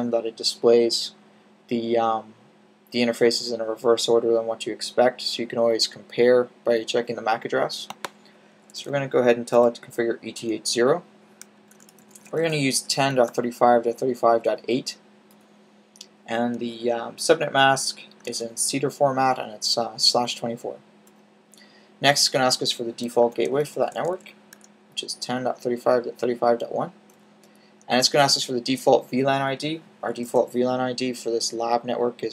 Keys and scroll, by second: 8.5-9.4 typing, 11.2-13.2 typing, 17.8-18.6 typing, 23.1-24.4 typing, 29.9-30.2 typing.